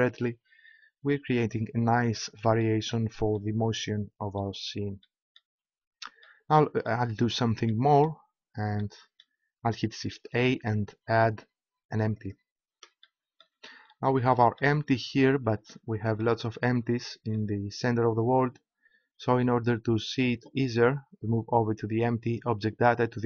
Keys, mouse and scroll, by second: 2.6-6.2 middle drag, 10.3 shift+a, 13.8-15.6 middle drag, 15.7-18.8 middle drag, 22.3-23.2 middle drag.